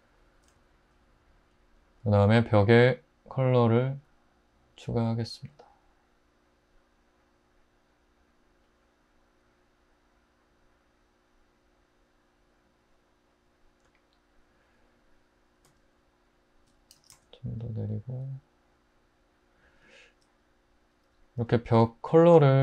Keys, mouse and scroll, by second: 17.0 typing, 22.3-22.6 middle drag.